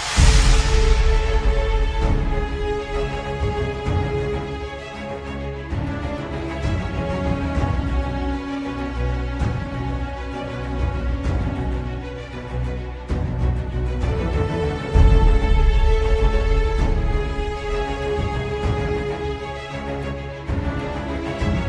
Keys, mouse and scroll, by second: 0.1 middle click, 0.6 scroll down 3, 0.9 shift+middle click, 1.3-1.8 scroll up 2, 1.8 click, 2.6 click, 3.2 shift+middle click, 3.5 click, 3.7 ctrl+t, 9.2 click, 11.0 click, 16.2 middle click, 16.2-16.6 scroll down 5.